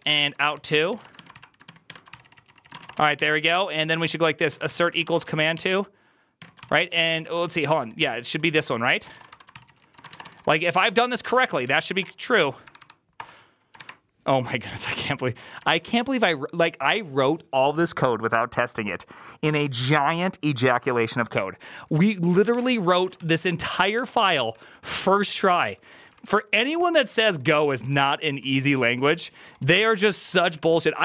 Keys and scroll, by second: 0.0-3.5 typing, 2.1 ctrl+c, 2.3 ctrl+c, 4.4 Tab, 4.5 ctrl+c, 4.6 ctrl+c, 4.7-5.4 typing, 6.3 Tab, 6.5 ctrl+c, 6.6-12.3 typing, 12.5 Up, 12.6 Up, 13.0 Return, 15.6 alt+{, 22.2 ctrl+a, 22.4-24.3 typing, 22.5 ctrl+c, 22.7 ctrl+c, 22.8 ctrl+:, 23.0 Return, 23.0 ctrl+t, 24.4 ctrl+d, 24.6 ctrl+d, 24.9 ctrl+d, 25.1 ctrl+d, 25.2 ctrl+d, 25.4 ctrl+d, 25.5 ctrl+d, 25.8 ctrl+d, 25.9 ctrl+d, 26.1 ctrl+d, 26.2 ctrl+d, 26.4 ctrl+d, 26.6 ctrl+c, 26.7-27.5 typing, 27.7 ctrl+u, 27.9 ctrl+u, 28.0 ctrl+u, 28.2 ctrl+u, 28.4 ctrl+u, 28.5 ctrl+u, 28.7 ctrl+u, 28.8 ctrl+u, 29.0 ctrl+u, 29.3 ctrl+u, 29.5 ctrl+u, 29.7 ctrl+c, 29.7-30.5 typing, 30.7 ctrl+d, 30.8 ctrl+d, 30.9 ctrl+d.